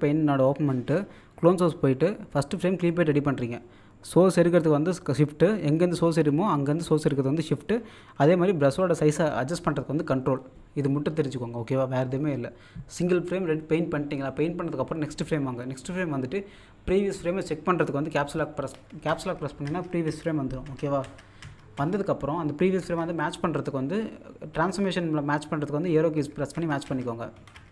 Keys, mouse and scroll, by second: 27.4 Up.